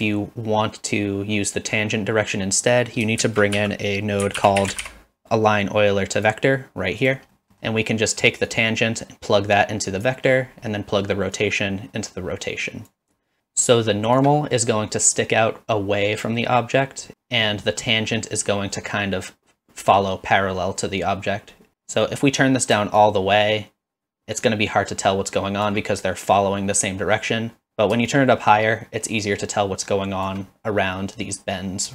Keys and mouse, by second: 3.2 shift+a, 7.4 middle click, 7.6 middle click, 8.5-10.1 drag, 11.4-12.9 drag, 13.4 shift+click, 22.2 middle click, 23.0-25.7 shift+drag, 28.2-30.3 shift+drag.